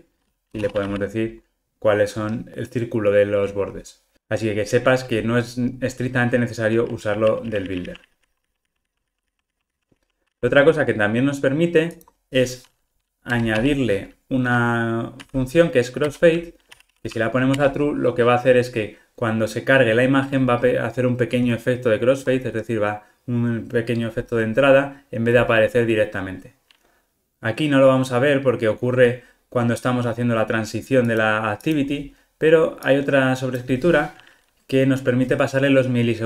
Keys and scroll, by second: 2.2 ctrl+r, 7.1 super+z, 7.8 super+z, 8.3 super+z, 9.2 super+z, 16.1 Return, 25.4 ctrl+r.